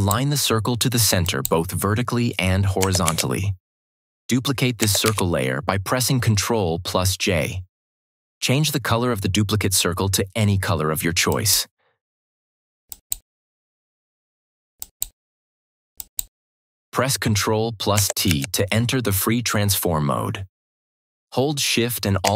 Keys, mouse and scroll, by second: 2.9 ctrl+d, 4.9 ctrl+j, 11.2 click, 18.2 ctrl+t, 22.1 ctrl+shift+t.